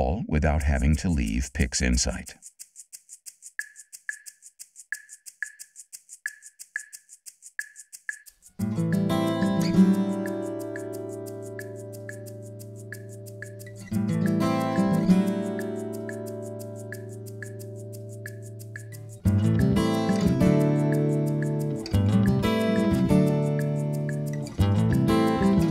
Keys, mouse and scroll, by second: 1.1 middle click, 1.1-2.1 scroll down 4, 2.2-2.5 scroll down 2, 4.0-5.1 drag.